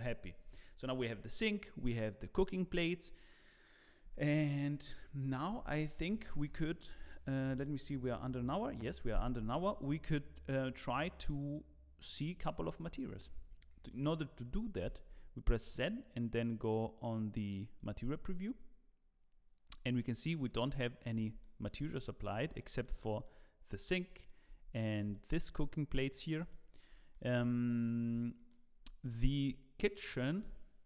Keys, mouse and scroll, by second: 0.2 scroll up 2, 10.2-11.6 scroll up 1, 11.6-13.3 scroll down 1, 13.9 ctrl+s, 14.8 z, 20.8 middle click, 21.1 scroll up 2, 21.4 shift+middle click, 21.9 click, 22.3 scroll down 2, 22.6 shift+middle click, 23.0 middle click, 24.1 shift+middle click, 25.1 shift+middle click, 26.9 middle click, 27.4 shift+middle click.